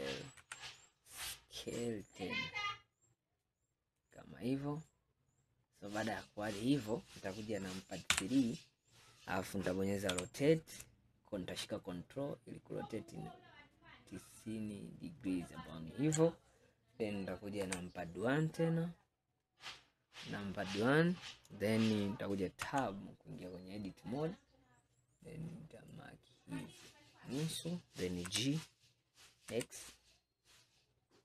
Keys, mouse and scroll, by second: 4.7-5.7 scroll up 5, 5.7-6.2 scroll down 2, 6.2-7.3 scroll up 2, 8.2 KP_3, 10.2 r, 17.7 KP_1, 18.7-19.3 scroll down 5, 20.1 scroll up 1, 20.7 scroll up 1, 21.9-22.5 scroll up 3, 22.7 Tab, 24.1 scroll up 2, 26.0 click, 28.4 g.